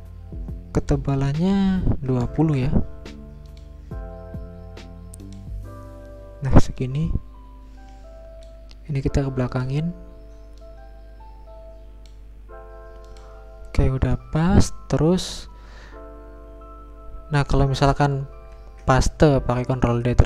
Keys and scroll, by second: 1.7-2.6 typing, 5.1 Return, 18.6 ctrl+d.